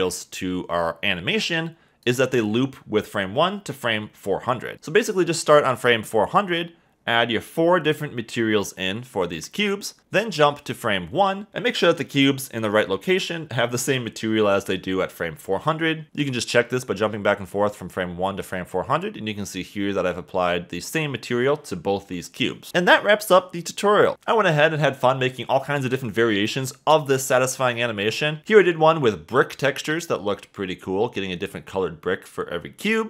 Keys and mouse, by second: 9.3 click, 10.8-12.1 drag, 14.0 click, 15.4 click, 18.3 a, 18.4 a, 20.0 click, 23.6 shift+middle click, 26.2 a, 26.3 a, 26.9 space.